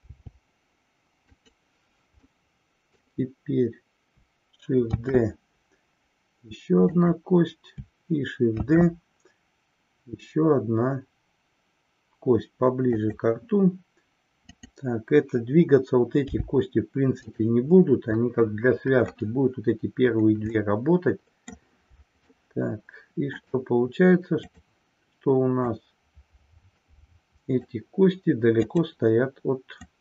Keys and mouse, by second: 1.4 click, 2.3-3.3 middle drag, 4.9 shift+d, 6.9 click, 8.5 shift+d, 14.5 click, 18.2-19.3 middle drag, 20.5-21.6 middle drag, 22.5-23.6 shift+middle drag, 24.4 click, 25.8-27.8 drag, 28.6 click, 29.8-30.0 drag.